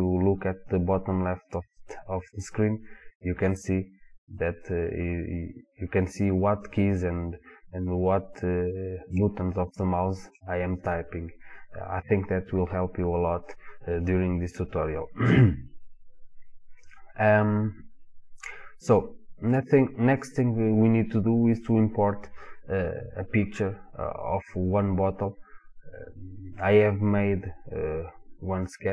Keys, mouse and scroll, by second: 2.3 click, 2.7 click, 3.3-3.6 drag, 3.6-4.3 right drag, 4.3 drag, 7.8 click, 8.7 click, 9.2-14.4 drag.